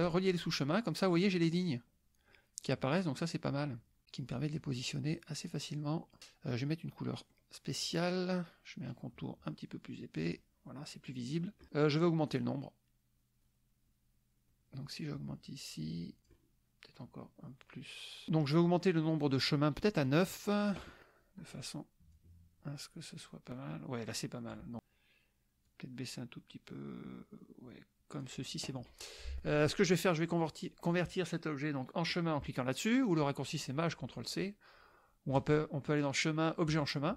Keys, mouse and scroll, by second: 0.1 click, 3.5 click, 5.1-6.2 drag, 7.4 click, 8.9 click, 10.2 click, 12.3 click, 14.5-16.4 drag, 17.6 click, 20.0 click, 22.1-24.7 drag, 25.7-28.4 drag, 35.4 click, 36.8 click.